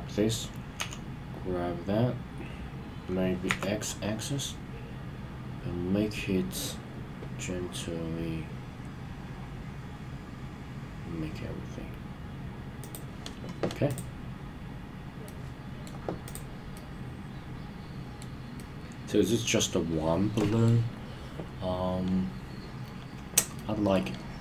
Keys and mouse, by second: 0.8 g, 3.5 x, 12.8 click, 15.3-15.9 middle drag, 16.2 click, 16.8-18.3 middle drag, 18.6-20.7 middle drag, 23.6-24.0 middle drag.